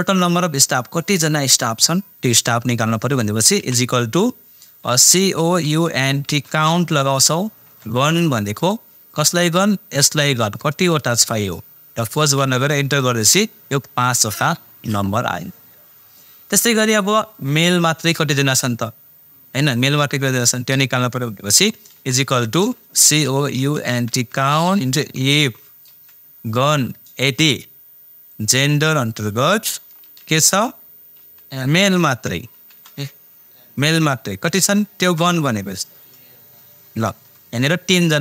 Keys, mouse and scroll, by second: 3.6 =, 4.8-7.6 typing, 10.0-12.2 drag, 12.0-12.7 typing, 21.9-26.4 typing, 28.3-30.2 drag, 30.2 ,, 31.2 shift+', 32.1 shift+m, 32.5 shift+', 35.0 shift+0.